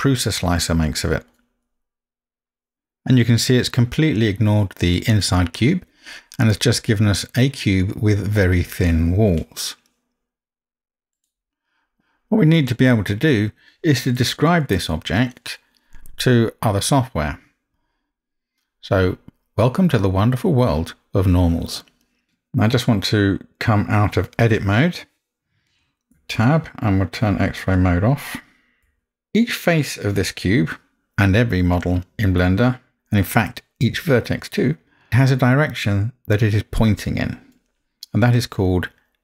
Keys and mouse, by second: 27.7-28.9 drag, 28.9 Tab, 29.0-30.2 middle drag.